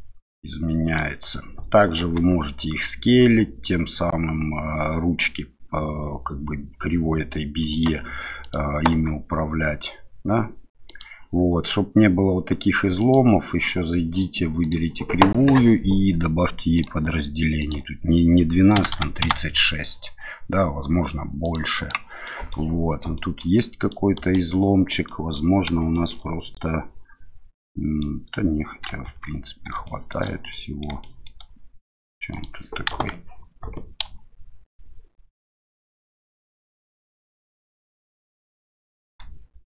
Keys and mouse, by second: 2.0 s, 7.7 click, 8.4 click, 8.9 s, 10.9 click, 13.0 click, 17.7-19.8 drag, 21.4 click, 21.9 click, 22.2 middle drag, 23.1 drag, 23.8 click, 24.2 Tab, 25.0 click, 25.9 shift+click, 27.5 click, 29.0 Tab, 29.8 shift+middle drag, 30.5 middle drag, 31.0 shift+middle drag, 32.3 click, 32.9 KP_1, 34.0 r, 39.0 s.